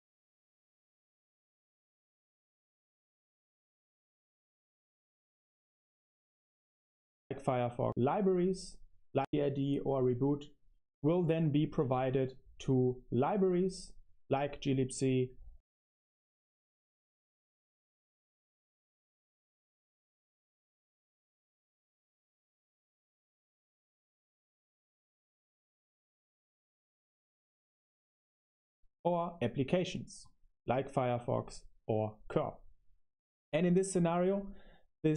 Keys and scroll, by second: 0.2 i, 0.5 shift+s, 1.0 Escape, 1.7-6.3 typing, 6.0 super+1, 6.3 super+1, 9.1 BackSpace, 15.3 space, 15.8 super+3, 17.0-18.4 typing, 19.7 super+1, 20.4 super+3, 21.0-27.9 typing, 30.8 super+3, 31.6-34.4 typing, 33.8 Escape, 34.2 super+1, 34.4 Return, 34.4 Escape, 34.4 super+1.